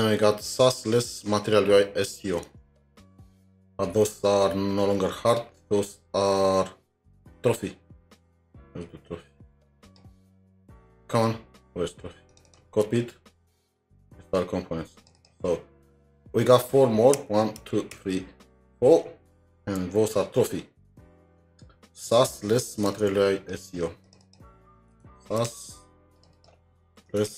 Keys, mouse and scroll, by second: 2.5 alt+Tab, 3.0-4.9 scroll down 2, 4.9-6.0 scroll up 5, 7.0-7.6 scroll up 3, 7.6-8.2 scroll down 5, 8.2 scroll up 3, 9.1 scroll up 1, 12.1-12.5 scroll up 5, 12.5 double click, 12.7 ctrl+c, 13.0-14.1 scroll down 5, 13.0 ctrl+c, 14.1-15.2 scroll down 1, 15.2 double click, 15.6-16.2 scroll down 1, 17.6 ctrl+d, 17.9 ctrl+d, 20.7 typing, 21.3 alt+Tab, 22.9 alt+Tab, 24.2 double click, 25.1-26.0 typing, 26.3 double click, 27.0-27.3 typing.